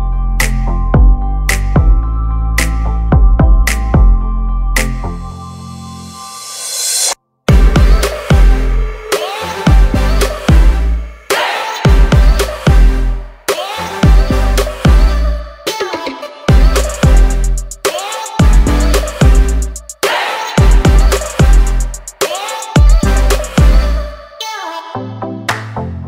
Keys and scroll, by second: 2.3 space, 2.7 p, 3.8 5, 4.1 Return, 10.7 e, 17.7 p, 18.5 5, 18.8 Return, 20.0 space, 24.0 p, 24.7 5, 25.0 Return.